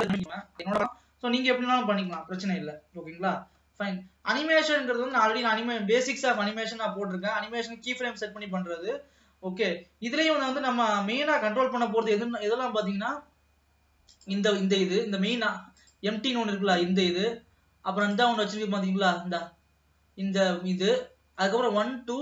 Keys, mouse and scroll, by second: 1.4 ctrl+s, 1.6 middle click, 2.1 ctrl+s, 4.6-6.4 drag, 6.9-9.9 scroll up 1, 12.6-14.2 middle drag, 14.2 click, 15.1 middle click, 15.2 scroll up 1, 15.9 click, 18.2 click, 21.2-22.2 middle drag.